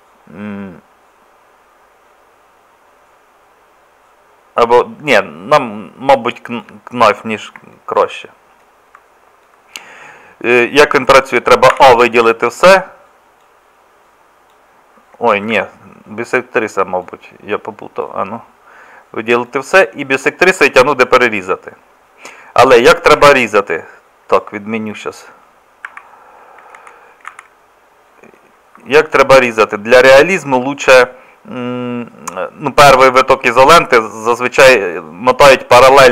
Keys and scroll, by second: 11.7 a, 23.2 Escape, 25.9 Escape, 26.8 ctrl+z, 27.3 ctrl+z.